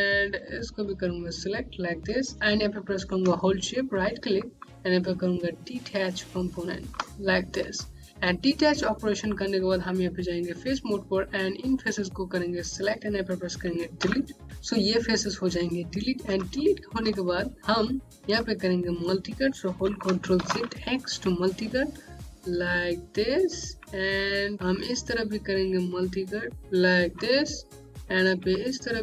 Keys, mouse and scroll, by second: 0.6 click, 3.1 shift+Num_Lock, 3.7 right click, 8.1 right click, 11.5 click, 13.9 Delete, 16.0 Delete, 16.2-16.8 scroll up 1, 17.0 alt+click, 17.6 scroll down 1, 20.3 ctrl+shift+x, 21.5 click, 24.8 click, 25.0 Home, 28.5 click.